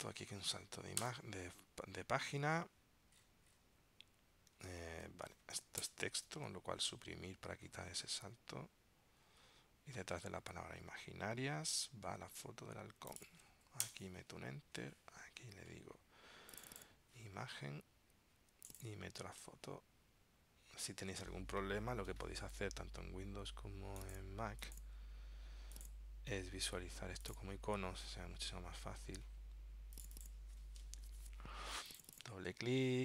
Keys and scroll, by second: 1.1 super+Return, 2.5 super+Tab, 4.7 super+Tab, 8.1 super+Tab, 10.2 super+Tab.